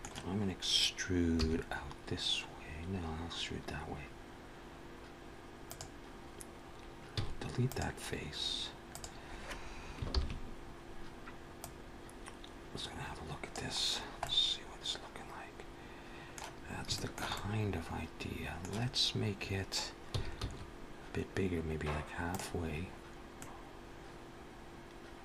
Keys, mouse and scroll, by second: 1.2 e, 7.0 x, 8.7 click, 9.9 ctrl+l, 11.4 click, 13.7 scroll down 3, 14.0 middle click, 16.4-16.8 scroll up 2, 16.8 shift+middle click, 17.2 middle click, 18.6-19.4 scroll up 2, 20.2 s, 22.5-23.0 scroll down 3, 23.2 middle click.